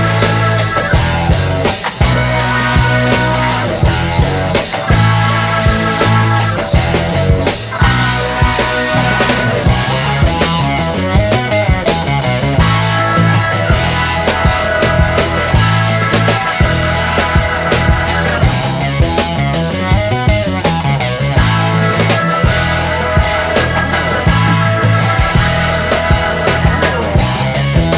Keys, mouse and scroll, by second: 2.1 ctrl+s, 2.3 click, 3.4-5.2 drag, 6.2 shift+Right, 7.5-9.7 drag, 10.8 click, 11.9 click, 13.0 shift+Left, 13.9-16.1 drag, 16.6-17.6 scroll down 1, 17.6 click, 18.8 click, 20.1 shift+Right, 21.3-23.5 drag, 25.9 click, 27.1 click.